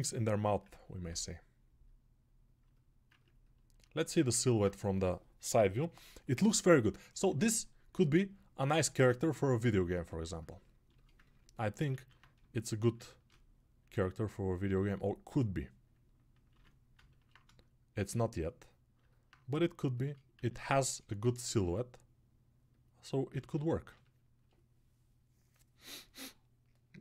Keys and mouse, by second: 16.5-20.5 right drag, 20.5-27.0 drag, 23.5 ctrl+r.